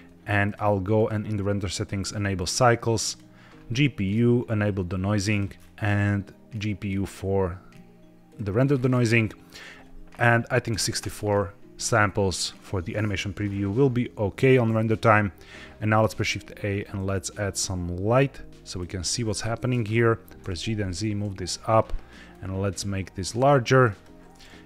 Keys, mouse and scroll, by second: 0.3 click, 0.9-1.8 drag, 2.3-3.1 drag, 3.9 click, 5.2 click, 5.5-6.5 scroll down 2, 6.5 click, 8.2 click, 8.6-9.2 scroll up 3, 9.4-11.0 drag, 13.4-13.7 scroll up 1, 15.9 shift+a, 19.3-19.6 middle drag, 19.6-20.3 scroll down 3, 20.3 g, 20.5 z, 21.3 drag, 22.2 click.